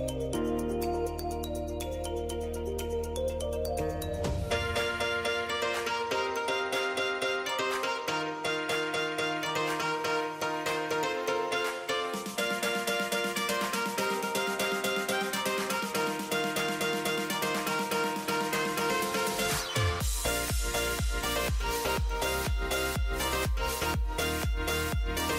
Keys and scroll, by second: 20.7 ctrl+j, 23.4 [.